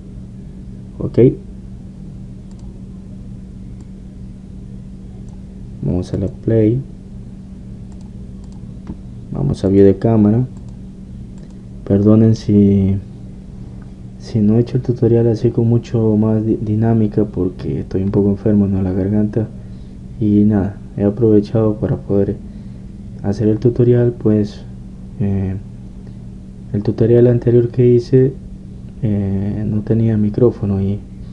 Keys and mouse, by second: 3.8-7.1 drag, 7.1 middle click, 7.2-10.8 drag, 10.9 click, 12.6 middle click.